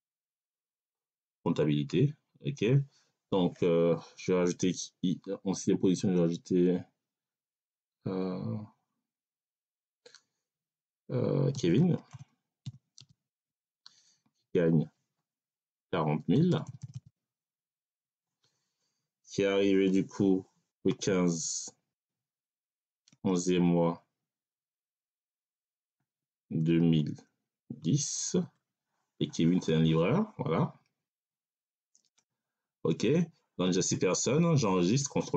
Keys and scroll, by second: 11.4-12.8 typing, 13.2 Tab, 15.7 4, 16.4 0, 17.8 Tab, 20.6 1, 20.8 5, 21.8 /, 24.3 1, 25.8 2, 26.5 0, 27.4 1, 27.7 0, 28.3 Tab.